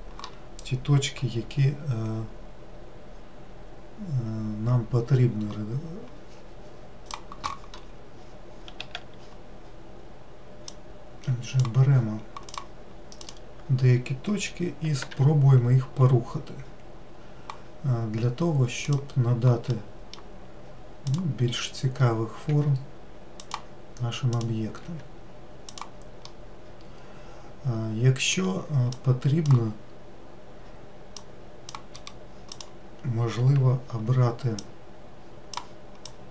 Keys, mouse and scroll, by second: 11.2-13.1 drag, 13.7 click, 15.6 g, 20.3-21.6 middle drag, 21.6 click, 23.0 g, 24.9 click, 25.4 g, 26.8-29.5 middle drag, 29.5 click, 31.7 click, 32.5 right click, 35.1-36.3 drag.